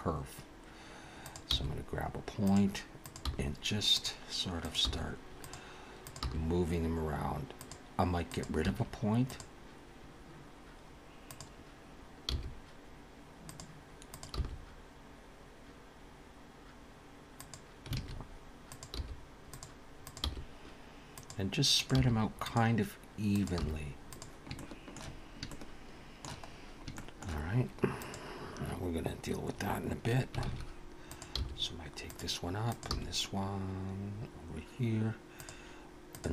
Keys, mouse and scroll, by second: 1.2 click, 1.5 g, 3.0 click, 3.2 g, 4.6 click, 4.9 g, 6.0 click, 6.2 g, 8.3 click, 8.7 x, 11.3 click, 12.5 g, 14.1 click, 14.4 g, 18.0 alt+a, 18.7 click, 19.0 g, 20.0 click, 20.2 g, 21.8 click, 22.6 g, 23.2 click, 23.6 g, 24.5 shift+middle click, 25.5 shift+middle click, 26.5-26.8 scroll down 3, 27.0 shift+middle click, 28.0 click, 30.4 alt+a, 31.1 click, 31.4 g, 32.7 click, 32.9 g, 36.1 click.